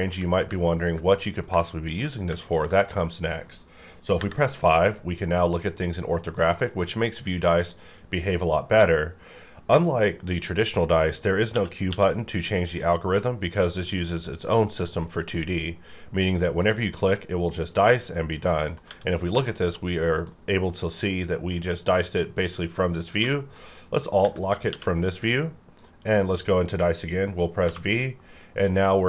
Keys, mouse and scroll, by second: 0.6 ctrl+middle click, 2.4 ctrl+middle click, 4.1 KP_5, 5.8 middle click, 11.5 q, 11.9 q, 16.6 click, 18.5 middle click, 18.8 Tab, 18.9 scroll up 1, 19.5 alt+a, 20.3-24.2 middle drag, 24.6 q, 25.7 click, 25.8-27.6 drag, 27.6 v, 28.4 scroll down 1, 28.8-29.0 scroll up 1.